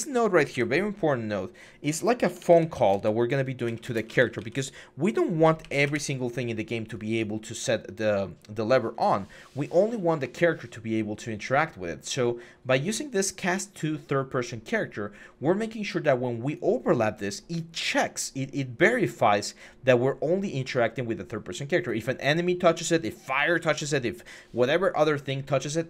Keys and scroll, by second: 0.3 Delete, 2.1-4.2 typing, 5.2 Up, 5.4 Up, 5.6 Return.